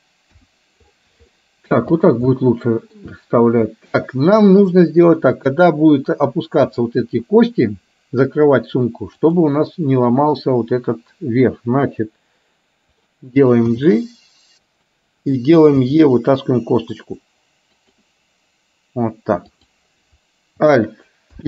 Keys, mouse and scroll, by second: 0.4 KP_1, 1.4 shift+middle click, 2.4 shift+middle click, 6.7 click, 9.3 click, 14.7 g, 17.7 e, 19.4 click, 21.3 alt+p.